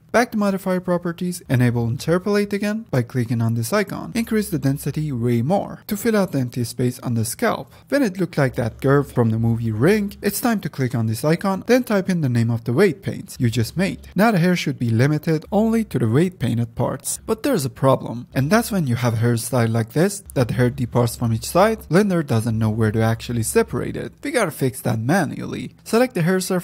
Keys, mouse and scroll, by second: 0.3 click, 1.2 click, 2.7 ctrl+z, 3.6 click, 4.1 middle click, 5.1-8.7 drag, 8.7 KP_0, 10.9-15.0 drag, 15.0-17.2 middle drag, 17.7 click, 18.2 click, 19.1-23.4 middle drag, 23.4 click, 25.7 F9.